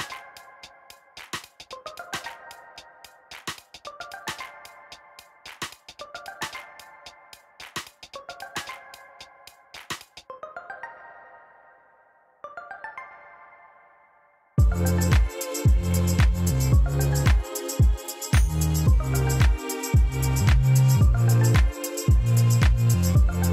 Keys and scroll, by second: 2.1 shift+d, 2.3 y, 5.6-7.5 typing, 6.9 Escape, 8.0 Return, 9.3 g, 9.6 y, 13.9-17.8 typing, 16.6 Escape, 17.5 Return, 19.7 shift+z, 21.1 shift+z, 22.9 x.